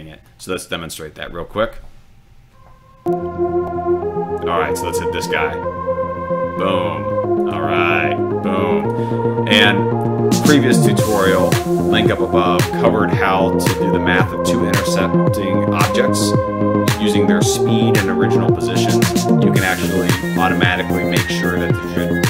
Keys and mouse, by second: 0.3 click, 5.0 click, 7.5-8.0 drag.